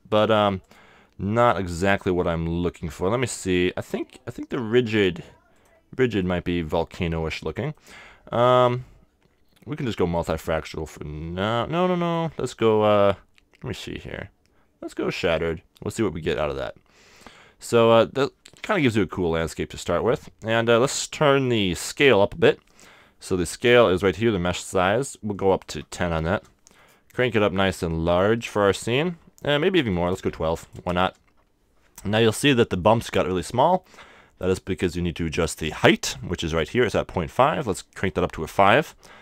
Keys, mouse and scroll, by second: 0.6-2.5 drag, 6.2-8.1 middle drag, 8.5-10.5 drag, 10.7-12.4 middle drag, 12.0-13.8 drag, 15.9-17.9 middle drag, 18.5-21.7 middle drag, 25.5-27.1 drag, 26.9-29.1 middle drag, 29.9-32.5 drag, 30.1 1, 31.1 2, 32.4-37.2 middle drag, 37.9-39.2 drag.